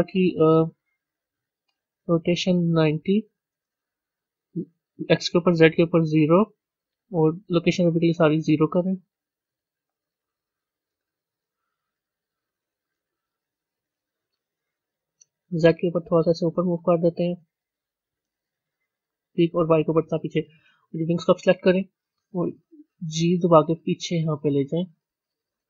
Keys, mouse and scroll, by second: 3.4-8.1 drag, 9.7-10.8 drag, 10.8 KP_0, 15.6-19.7 drag, 21.3 click, 22.8 g.